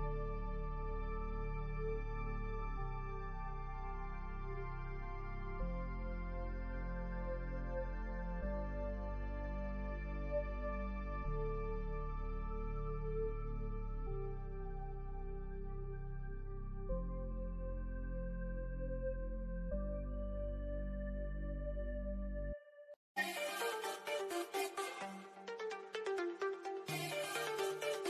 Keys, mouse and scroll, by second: 6.5-7.2 scroll up 1, 9.2 middle click, 9.6 scroll up 1, 11.4-16.4 drag, 16.4 Left, 18.7 Right, 19.1 Down, 23.3-24.7 drag, 24.7 Up.